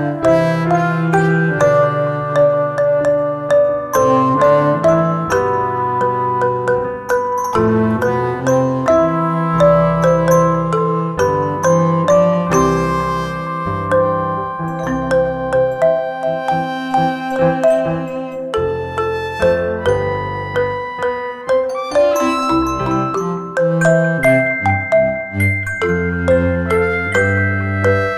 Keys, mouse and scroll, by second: 0.7-7.8 alt+drag, 7.8 right click, 9.1-21.1 drag, 21.1-25.6 alt+drag, 25.6 right click, 26.6 click.